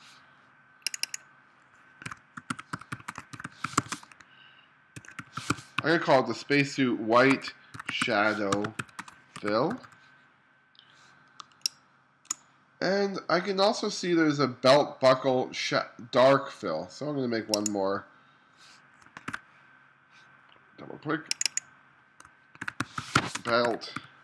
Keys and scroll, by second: 2.1-4.0 typing, 5.0-5.8 typing, 7.4-9.8 typing, 11.4 space, 19.3 shift+b, 22.7-24.2 typing.